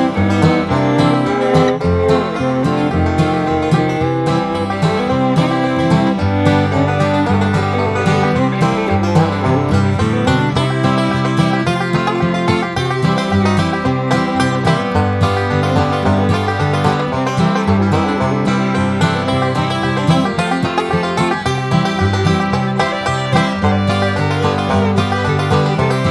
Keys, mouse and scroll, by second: 1.1 click, 1.5 right click, 2.2 click, 3.3 click, 5.0 click, 5.4 click, 5.8-7.4 drag, 11.9 click, 14.2 click, 15.5 click, 16.6 click, 18.1 BackSpace, 18.3 1, 18.6 5, 19.9 click, 21.1 click, 21.6-21.9 scroll up 2, 23.0 click, 24.5 click, 25.4 click.